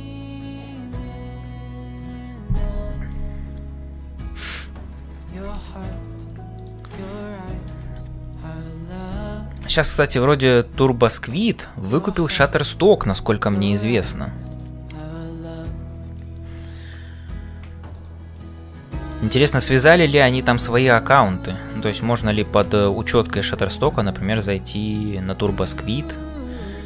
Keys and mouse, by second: 0.0-26.8 typing, 5.6 shift+middle click, 6.6 click, 7.1 middle click, 11.9 click, 17.9 click, 19.4 shift+middle click.